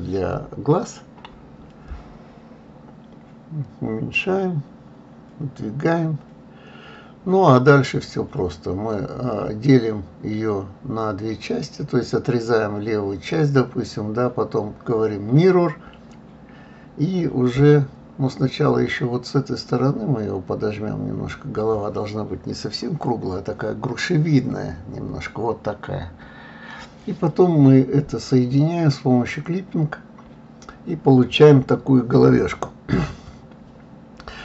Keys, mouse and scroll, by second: 1.1 g, 8.2 click, 10.0 g, 11.7-14.2 middle drag, 14.2 click, 22.7 g, 26.2 click, 26.7 g, 33.6 click.